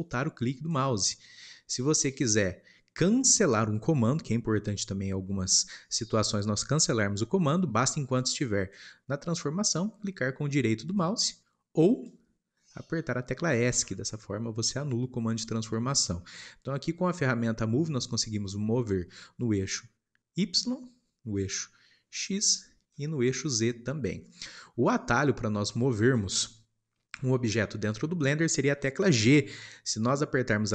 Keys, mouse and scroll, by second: 12.0 click, 19.6 click, 21.4 click, 23.5 click, 27.6-30.7 shift+middle drag.